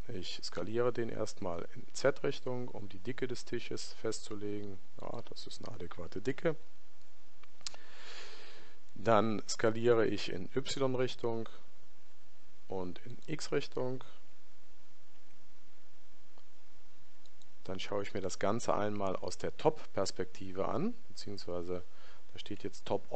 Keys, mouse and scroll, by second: 21.2-23.1 middle drag.